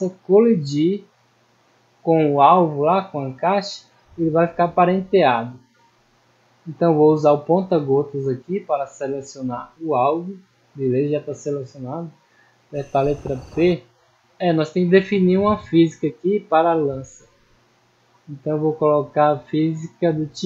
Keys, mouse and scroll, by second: 1.5 middle click, 2.3 scroll up 1, 2.8 middle click, 3.5 scroll up 1, 3.9 middle click, 5.1 middle click, 7.0 scroll up 1, 7.5 middle click, 8.9 click, 10.0 click, 10.9-11.5 scroll down 2, 14.0-14.4 middle drag, 14.7-15.2 middle drag, 17.5 click, 19.4 click, 20.3 click.